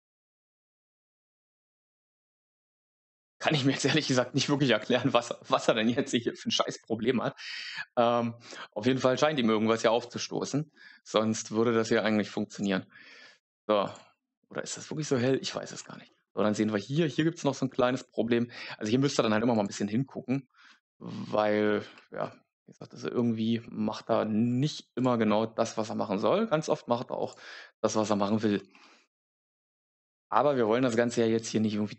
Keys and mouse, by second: 3.4 middle click, 24.9 click, 29.0 middle click.